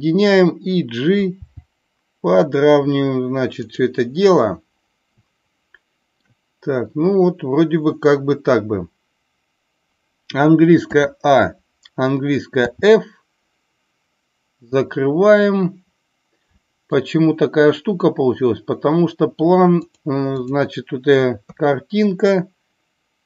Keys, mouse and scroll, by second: 3.7 click, 5.2-6.2 shift+middle drag, 14.8-16.8 middle drag, 19.8 click, 21.4 KP_3.